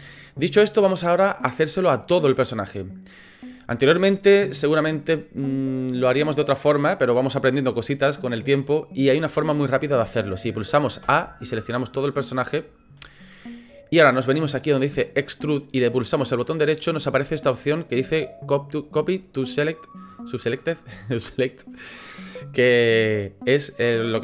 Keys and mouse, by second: 0.6 middle click, 1.6 middle click, 11.0 a, 16.5-24.2 drag.